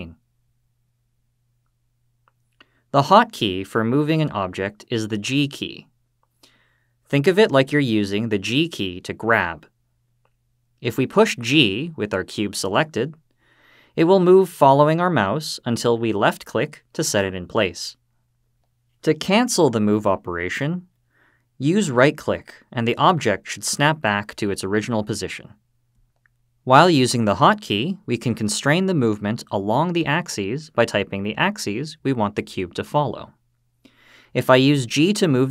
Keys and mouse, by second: 0.6-1.5 drag, 9.2 g, 17.5 click, 19.7 g, 24.0 right click, 32.4 g.